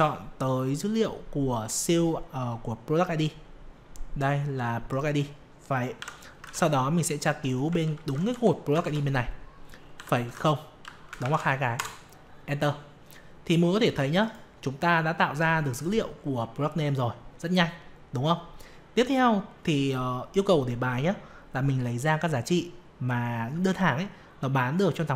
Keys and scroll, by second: 6.4 alt+Tab, 7.9 ctrl+Up, 8.8 ctrl+shift+Down.